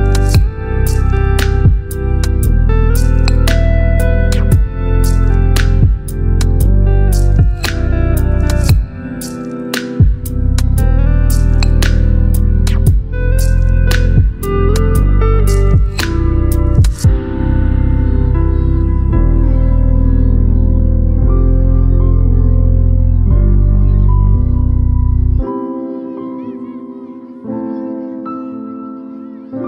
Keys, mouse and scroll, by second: 0.6 shift+y, 3.7 click, 5.4 v, 5.8 ctrl+t, 9.9 ctrl+alt+t, 9.9-10.9 alt+drag, 11.9-15.0 drag, 16.4-17.4 drag, 18.0-19.8 drag, 21.0-27.2 drag.